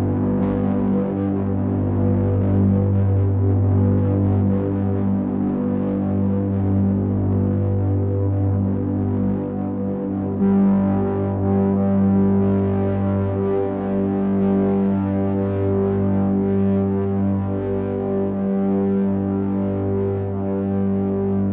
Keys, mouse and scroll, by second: 2.2 ctrl+right click, 8.7 b, 13.6 click, 18.1 click, 19.7 b.